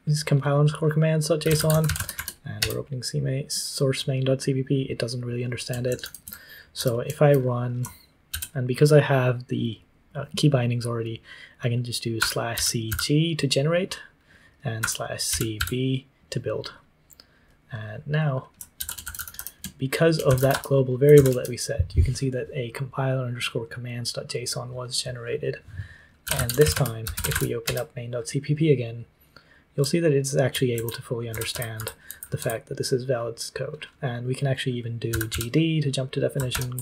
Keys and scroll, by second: 1.1-3.0 typing, 5.8 shift+;, 6.2 q, 8.3 ctrl+c, 11.9-13.3 typing, 14.5-16.0 typing, 18.7 ctrl+c, 18.9-21.5 typing, 25.9-27.7 typing, 29.7-32.3 typing, 34.8-35.8 typing, 36.5 ctrl+o.